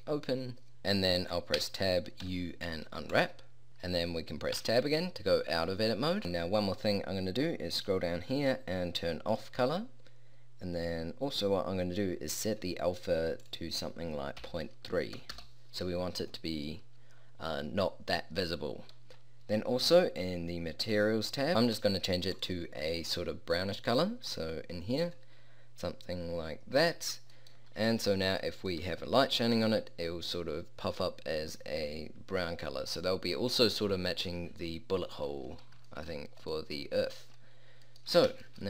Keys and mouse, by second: 1.6 Tab, 2.3 u, 4.6 Tab, 15.4-20.9 middle drag, 21.5 middle click, 25.2-27.4 middle drag, 31.8-35.4 middle drag.